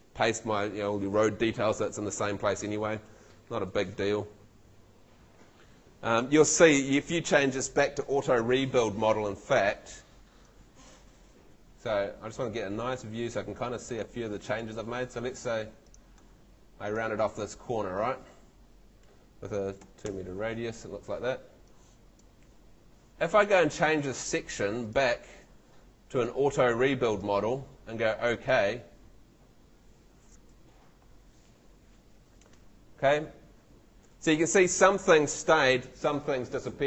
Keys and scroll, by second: 9.0 Escape, 15.4 Home, 19.8 2, 20.0 Page_Up, 21.0 Home.